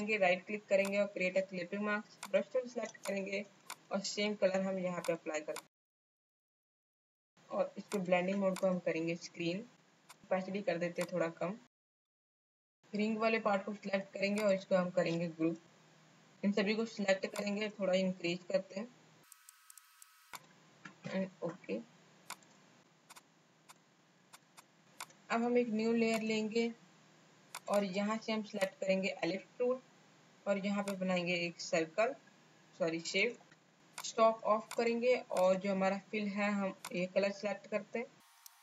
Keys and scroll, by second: 2.9 space, 3.5 alt+space, 7.1 space, 15.5 ctrl+g.